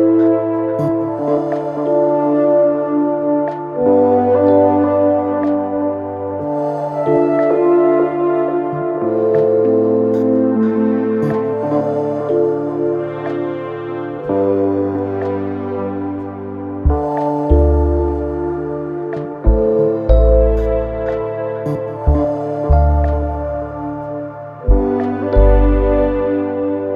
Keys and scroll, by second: 5.6 4, 7.2 3, 8.0 Delete, 8.5 4, 9.8 ctrl+d, 9.9 Escape, 12.0 3, 13.1 ], 15.3 b, 15.4 o, 15.6 y, 15.7 space, 15.9 Return.